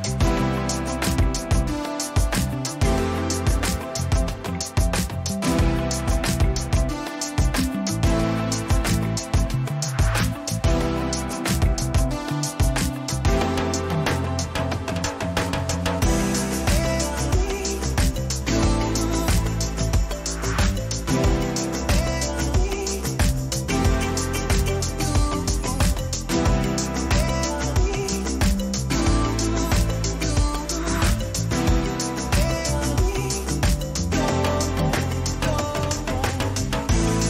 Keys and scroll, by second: 0.3 ctrl+a, 3.1-4.0 typing, 6.8 1, 7.6 6, 7.8 Return, 9.7 ctrl+t, 12.8 Return, 13.4 Right, 15.0 Up, 15.6 Left, 17.5 ctrl+j, 21.1 Left, 23.9-27.0 typing, 28.6 ctrl+t, 34.1 Return, 36.7 ctrl+j.